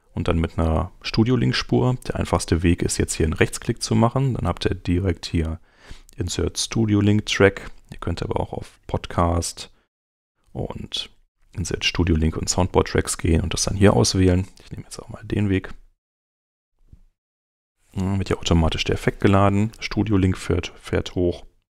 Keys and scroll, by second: 21.1 super+Tab.